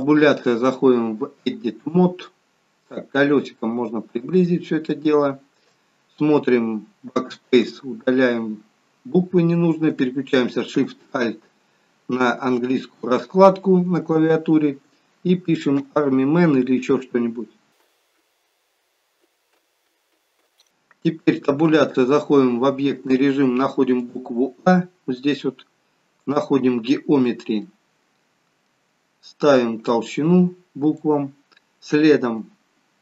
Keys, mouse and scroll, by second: 3.1-4.8 scroll up 7, 4.8 shift+middle click, 7.0-7.5 BackSpace, 15.7 shift+a, 17.8 shift+r, 18.1 shift+m, 19.2-20.3 typing, 21.4 Tab, 23.9 click, 26.3 click, 27.6 middle click, 29.8 click, 31.7-32.5 scroll down 1, 32.5 scroll down 2.